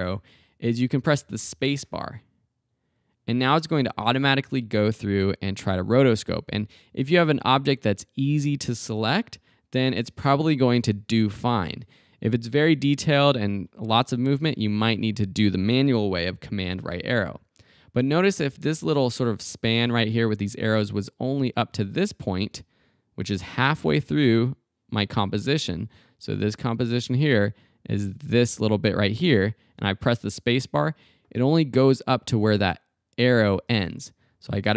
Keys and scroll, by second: 1.4 space, 11.7 space, 14.7 super+Right, 29.2 space, 33.6 space.